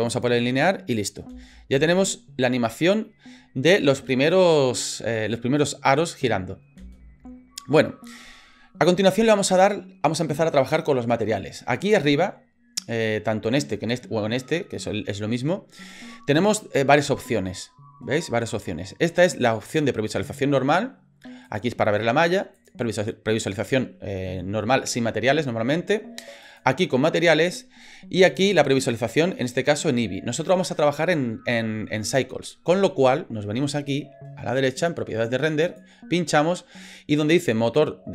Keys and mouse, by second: 1.0 click, 1.3 space, 6.8 space, 21.5 click, 22.5 click, 26.4 click, 28.3 click, 35.6 click.